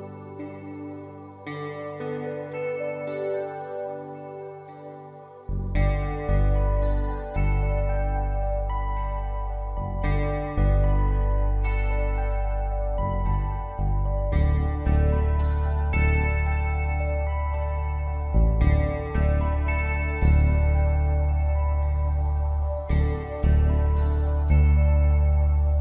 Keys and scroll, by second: 0.0-1.2 typing, 2.3 Delete, 3.8 space, 4.6 v, 9.5 space, 12.0 ctrl+e.